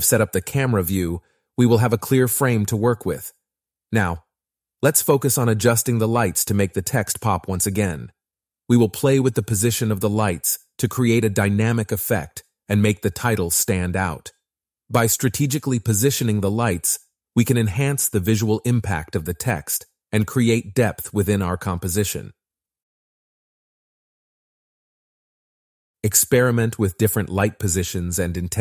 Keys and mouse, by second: 3.6 click, 5.1 click, 6.5 click, 8.8 click, 10.7 g, 14.2 click, 15.1 g, 18.2 shift+d, 18.7 g, 19.1 click, 23.3 click, 23.6 g, 24.6 click.